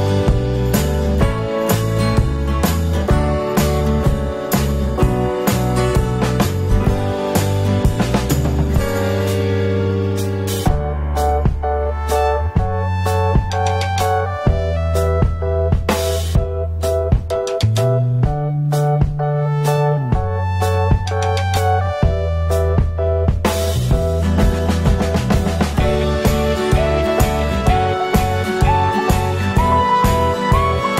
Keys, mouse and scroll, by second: 1.3 alt+middle click, 5.8 alt+middle click, 11.3 alt+middle click, 17.1 alt+middle click, 19.9 alt+middle click, 23.3 alt+middle click, 27.6 ctrl+click, 28.1 ctrl+click, 28.3 ctrl+click.